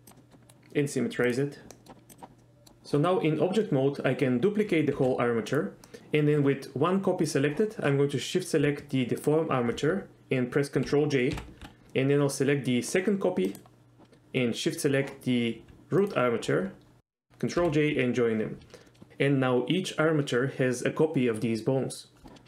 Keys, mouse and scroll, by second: 0.2 middle click, 0.5 right click, 1.8 middle click, 2.1 click, 2.4 middle drag, 5.0 shift+d, 5.6 right click, 9.3 shift+click, 11.5 ctrl+j, 13.0 click, 13.6 click, 16.1 ctrl+click, 17.7 ctrl+j, 18.9 middle click.